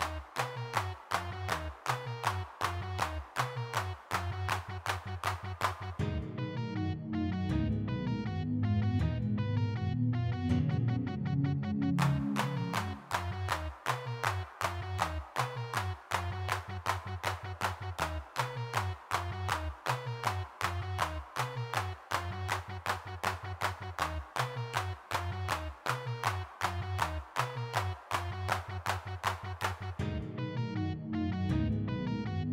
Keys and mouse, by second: 0.0 g, 0.1 f, 0.7 click, 1.4 n, 3.0 n, 4.3 middle click, 4.6 3, 5.7 middle click, 6.6 middle click, 7.4-8.6 drag, 9.0 click, 10.5 middle click, 11.2-12.5 middle drag, 12.7-13.7 middle drag, 15.4 f, 16.6-18.7 middle drag, 18.8 middle click, 19.3-20.5 middle drag, 20.5 click, 20.8 middle click, 21.5 click, 22.5 middle click, 23.3 click, 24.0-25.4 middle drag, 26.5 f, 27.0 click, 28.5 ctrl+Up, 29.6-31.1 middle drag, 31.2-32.5 middle drag.